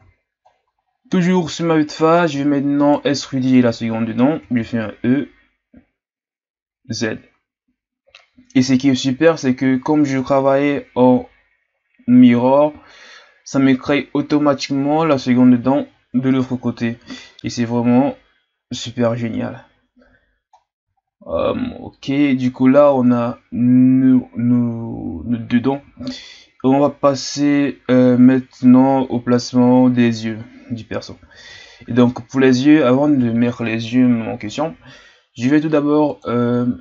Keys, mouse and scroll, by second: 0.5-0.8 scroll down 4, 0.8-1.9 scroll up 6, 1.9-4.3 right drag, 4.3 e, 20.6-20.9 scroll down 5, 20.9-21.4 shift+scroll up 6, 26.0-26.8 shift+scroll up 1, 31.3 Tab, 32.7-35.8 shift+scroll down 3, 36.1-36.8 drag.